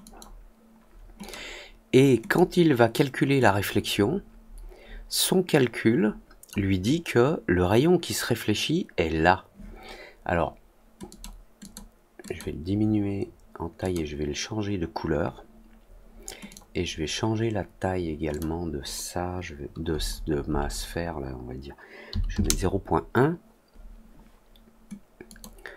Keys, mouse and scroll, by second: 1.1 click, 2.2 click, 3.4-6.4 drag, 11.0 click, 11.5 click, 12.2 click, 13.7 click, 16.4 click, 18.2 click, 25.2 click.